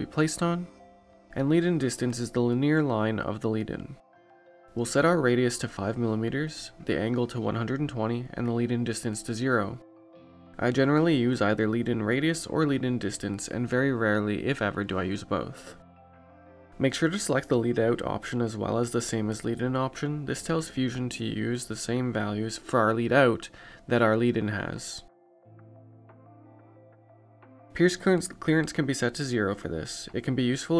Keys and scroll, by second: 10.4 5, 12.7 1, 12.9 2, 15.4 0.